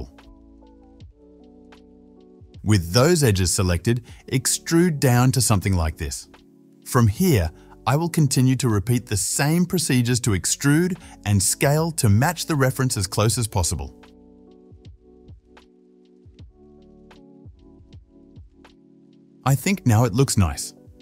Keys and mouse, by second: 2.5 shift+z, 3.6 e, 6.9 KP_7, 8.4-11.4 shift+middle drag, 8.4-12.6 typing, 11.4 shift+click, 11.7-13.4 middle drag, 13.4-15.2 shift+drag, 14.8-16.4 typing, 15.2-16.5 shift+middle drag, 16.5-18.4 shift+drag, 17.4 KP_7, 17.8 e, 18.4-20.1 shift+middle drag.